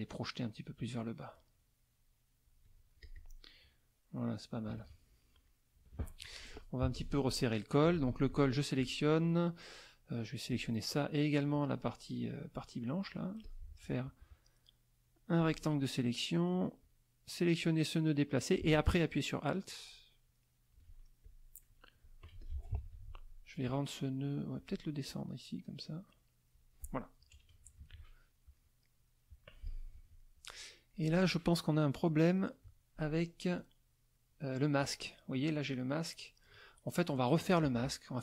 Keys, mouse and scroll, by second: 0.8-2.6 drag, 3.0 click, 4.7 KP_Subtract, 5.5 middle click, 5.5-6.3 scroll up 2, 6.0 middle click, 6.8 z, 6.9 click, 7.5 middle click, 7.5-7.9 scroll up 1, 7.8 F2, 8.3 click, 10.5 shift+click, 13.4-15.6 drag, 16.8-20.9 drag, 21.2 alt+click, 22.4 ctrl+z, 22.4 ctrl+click, 22.8 ctrl+F2, 23.7 click, 24.6 click, 25.0-26.7 drag, 27.3 KP_Subtract, 28.6 click, 29.6 click, 29.9 F1, 30.2 middle click, 31.5 click, 33.5 click, 34.8 click.